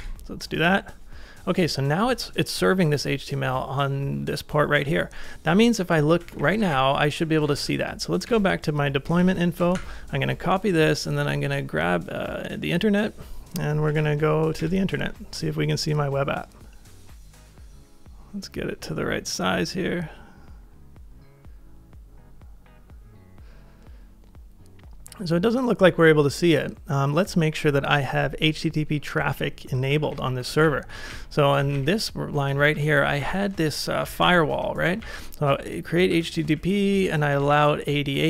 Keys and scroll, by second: 6.3 ctrl+a, 6.4 k, 6.7 ctrl+a, 7.5 ctrl+w, 7.6 h, 8.3 Return, 9.2 shift+v, 9.6 space, 9.7 y, 14.0 super+v, 14.6 Return, 29.9 ctrl+a, 30.6 ctrl+a, 31.0 ctrl+a, 31.7 ctrl+a, 32.7 ctrl+r, 33.7-34.7 typing, 35.0 alt+Right, 35.1 alt+Right, 35.4 alt+Right, 35.4 alt+Right, 36.1 alt+Right, 36.5 alt+Right, 37.0 Down, 37.3 Right.